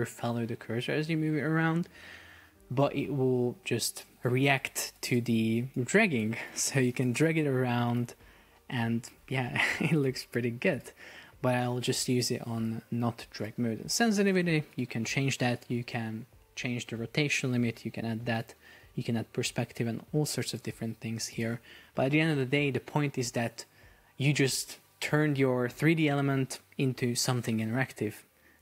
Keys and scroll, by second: 9.4 Escape, 22.2 super+p.